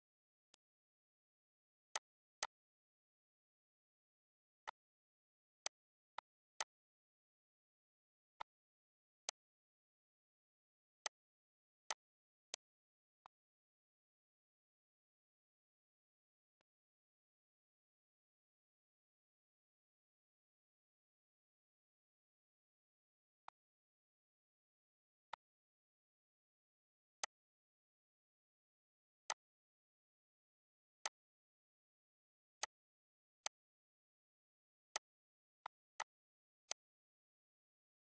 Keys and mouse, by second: 0.5 click, 1.3 click, 4.4 click, 5.3 click, 10.3 click, 12.1 click.